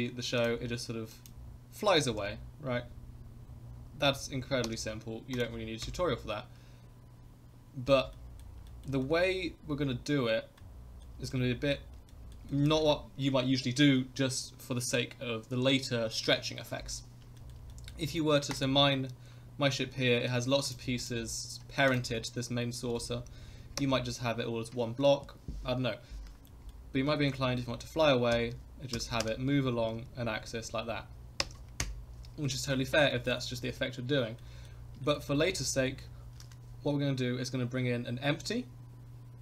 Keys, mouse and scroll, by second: 0.4 click, 1.1 click, 2.0 g, 5.3 click, 5.8 KP_0, 8.1 middle drag, 8.7 shift+middle drag, 9.0 middle click, 9.6 scroll up 3, 10.6 middle click, 11.3-11.7 middle drag, 12.1 shift+middle drag, 12.5 middle drag, 12.7 scroll up 1, 17.4 shift+middle drag, 17.7 middle click, 18.5 click, 20.6 click, 21.0 click, 21.9 click, 22.8 r, 26.5 scroll up 1, 26.5 middle drag, 26.8 scroll down 1, 27.2 shift+middle click, 27.4 middle drag, 27.7 scroll down 2, 28.3 KP_0, 28.9 g, 31.8 KP_0, 32.4-32.8 middle drag, 33.1 shift+middle drag, 33.4 middle click, 34.4-34.7 middle drag, 35.0 shift+middle drag, 35.3 middle drag, 35.6 scroll up 2, 35.9 shift+middle click, 36.4 shift+a.